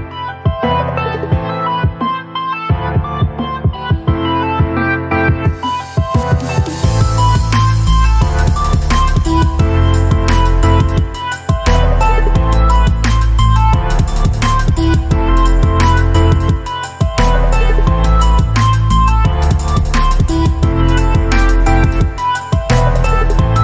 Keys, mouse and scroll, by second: 0.0 click, 0.5 space, 0.7-1.6 click, 1.1 space, 1.6 space, 1.8 space, 3.6-7.1 drag, 8.7 Down, 11.8 click, 12.2 space, 12.3-12.9 click, 12.7 space, 13.9 click, 16.6 click, 19.8 click, 21.6 click.